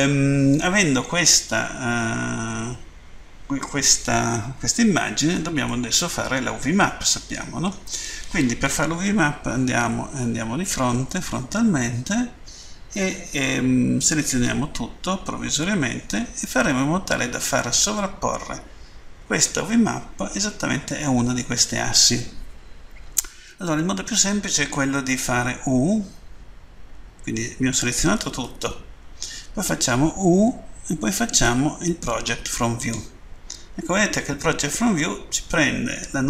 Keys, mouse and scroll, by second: 5.7 middle click, 9.5 End, 29.6 typing, 32.7 click.